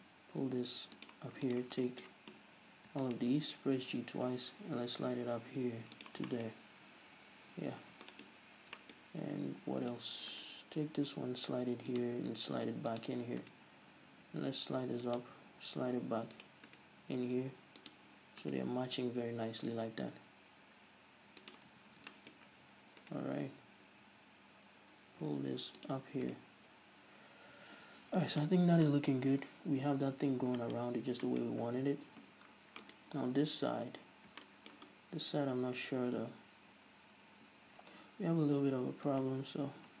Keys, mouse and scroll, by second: 0.0 g, 1.2 click, 1.6 right click, 1.8 scroll down 1, 2.0-3.2 shift+middle drag, 3.2-4.0 ctrl+right drag, 4.0 g, 6.2 shift+click, 6.4-10.5 shift+middle drag, 6.6-7.6 scroll up 1, 7.6 scroll down 1, 8.5-8.9 scroll up 1, 9.2-9.7 scroll up 2, 9.7-10.5 scroll up 1, 10.5-10.9 right drag, 10.9 g, 12.1 click, 12.2 g, 13.2 click, 13.6-14.2 right drag, 14.2 g, 15.3 click, 15.5 g, 16.6 click, 16.9 right click, 17.0 g, 18.0 click, 18.5 right click, 18.9 g, 21.7 click, 21.8 a, 22.0 scroll down 1, 22.2 shift+middle click, 22.6 a, 22.8-23.1 scroll up 1, 23.1 right click, 23.5 g, 26.0 click, 26.4 right click, 27.3 scroll down 1, 27.7 a, 28.3-33.0 shift+middle drag, 30.9-31.4 scroll up 1, 31.6-32.5 scroll up 1, 33.0 right click, 34.2-34.6 scroll down 1, 34.6-39.3 shift+middle drag, 35.1 scroll down 1, 35.3 scroll up 1, 38.1-38.4 scroll down 1, 38.4-39.3 scroll up 2, 39.3 alt+right click, 39.9-40.0 scroll down 1.